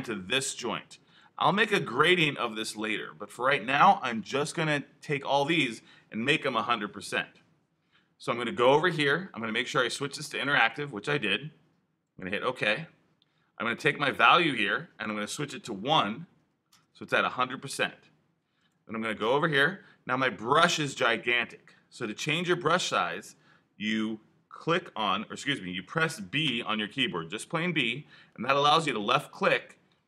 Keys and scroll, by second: 15.8 |, 26.4 b.